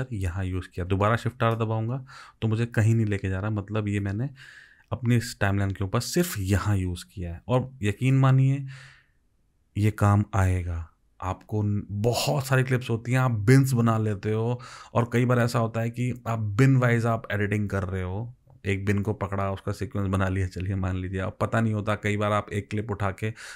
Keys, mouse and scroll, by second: 1.6 shift+r, 3.0 shift+r, 4.1 shift+r.